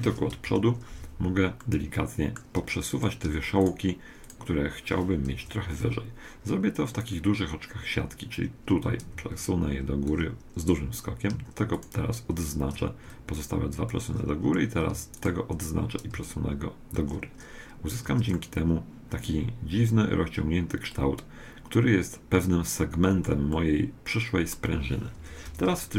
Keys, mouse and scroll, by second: 0.5 KP_1, 1.7-2.9 middle drag, 2.9-5.9 right drag, 5.4 KP_1, 6.2 middle click, 8.8-10.8 drag, 11.7-13.7 right drag, 13.1-15.1 drag, 15.3-17.1 right drag, 16.2-17.9 drag, 18.1 Tab, 18.3-20.3 middle drag, 23.5-25.2 middle drag, 25.2 Tab, 25.5 KP_1.